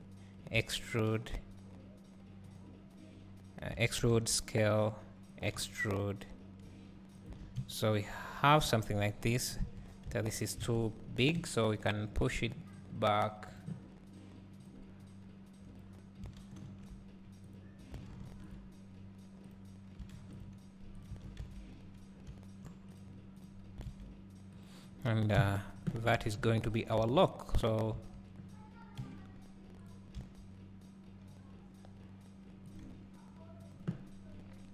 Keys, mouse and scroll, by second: 4.3 s, 7.4 Tab, 7.6 `, 9.1 KP_3, 9.8 Tab, 10.6 alt+a, 12.3 b, 13.6-17.6 drag, 18.2 ctrl+r, 20.2 ctrl+r, 22.2 scroll down 1, 22.3 `, 24.7 click, 25.4 KP_Divide, 27.0 KP_3, 29.0 g.